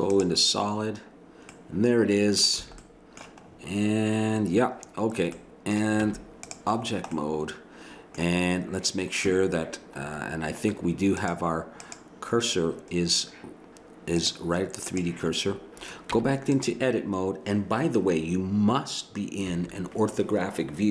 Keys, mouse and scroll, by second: 1.6-2.8 middle drag, 2.6 a, 6.2 Tab, 10.1-11.1 middle drag, 11.1 click, 15.0 click, 16.1 Tab, 19.5 KP_1.